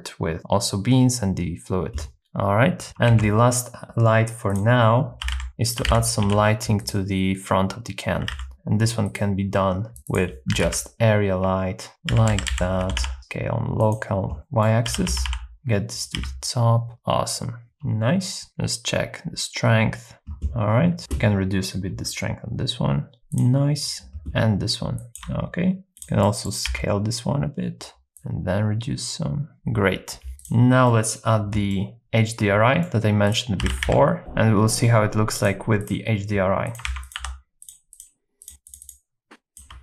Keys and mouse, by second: 2.2 r, 2.2 z, 3.1 shift+a, 5.2 g, 5.4 z, 5.7 click, 5.9 g, 6.3 y, 6.8 click, 8.2 r, 8.3 x, 10.0 click, 10.5 r, 10.7 x, 12.1-13.0 typing, 13.8 click, 14.4 middle click, 14.9 g, 15.1 y, 15.3 y, 16.0 click, 16.2 s, 18.5-20.1 shift+drag, 20.1 s, 20.1 x, 22.1-23.2 shift+drag, 25.1 shift+click, 26.0 click, 26.3 middle click, 26.7 s, 28.2-29.5 shift+drag, 30.4 click, 30.9 middle click, 31.7-32.9 middle drag, 33.2 click, 33.6-34.2 typing, 35.5 click, 37.0 shift+a, 38.0 click, 39.3 shift+click.